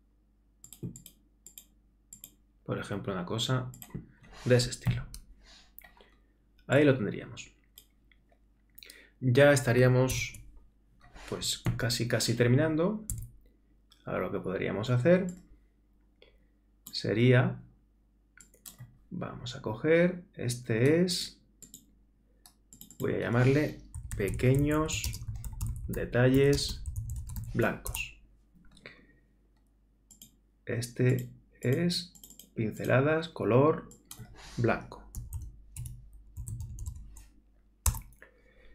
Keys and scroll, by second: 11.7 super++.